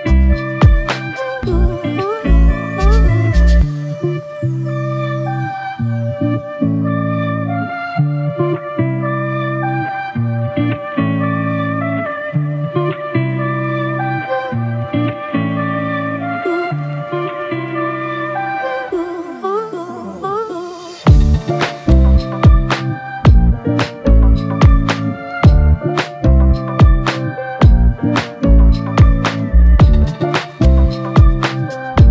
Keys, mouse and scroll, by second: 7.2 ctrl+click, 13.5 double click, 15.9 ctrl+click, 22.5 alt+shift+click, 23.6 alt+click, 27.2 double click, 30.5 ctrl+click.